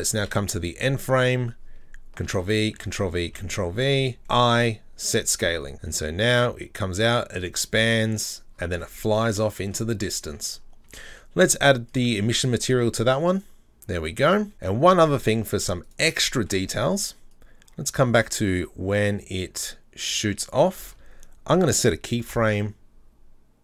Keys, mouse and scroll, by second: 0.2 Up, 2.3 ctrl+v, 2.8 ctrl+v, 2.8 ctrl+v, 3.8 ctrl+v, 5.7-8.5 drag, 8.5-8.8 scroll down 6, 8.8-10.0 middle drag, 10.0 scroll, 10.1 scroll up 2, 10.3-10.9 middle drag, 10.9 Tab, 13.4-14.5 drag, 14.5 middle click, 14.8-15.5 scroll up 3, 15.5 Tab, 15.9 right click, 16.4-17.3 shift+middle drag, 17.3-20.7 drag.